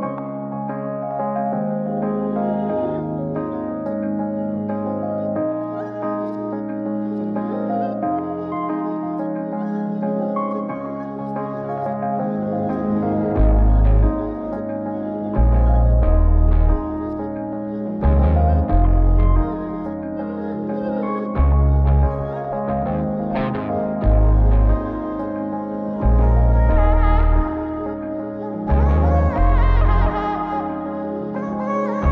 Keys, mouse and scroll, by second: 0.3 click, 0.9 middle click, 1.9 shift+d, 4.2 shift+r, 4.4 shift+r, 5.1-6.4 middle drag, 6.7 n, 7.3 click, 8.8 click, 10.8 click, 13.0 click, 13.8 click, 14.1 click, 14.8-15.9 drag, 16.2 click, 17.1 click, 18.1 shift+r, 19.0 click, 20.0 click, 21.0 click, 22.1 click, 24.2 click, 25.6 click, 28.0 click, 28.5 middle click, 29.7 click, 30.5 click, 31.0 click.